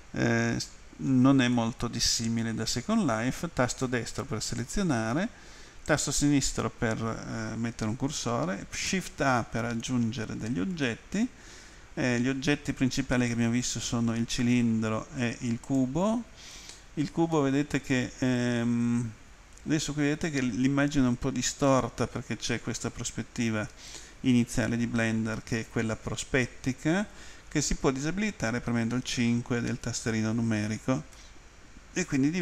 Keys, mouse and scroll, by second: 1.0 middle click, 1.6 middle click, 3.8 right click, 5.2 right click, 5.9 click, 15.7 click, 17.4 middle click, 21.2 middle click, 22.8 middle click, 31.2 middle click, 32.3 middle click.